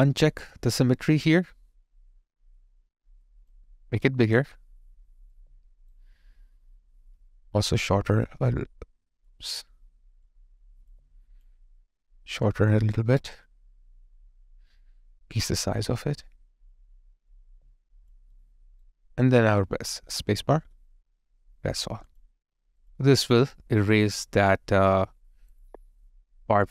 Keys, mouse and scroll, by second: 5.3 alt+right click, 10.9 alt+click, 18.3 alt+right click, 20.5 space, 23.9 alt+click.